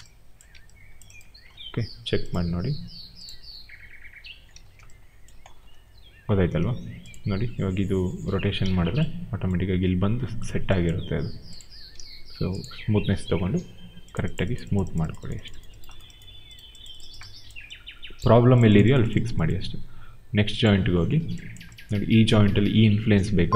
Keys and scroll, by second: 1.4 w, 4.4 ctrl+z, 6.5 ctrl+z, 8.5 ctrl+z, 11.9 ctrl+z.